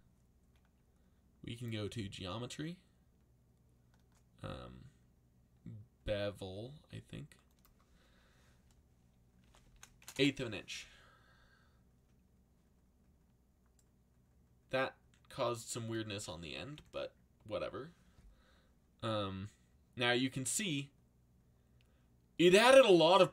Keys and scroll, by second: 9.1-10.5 typing.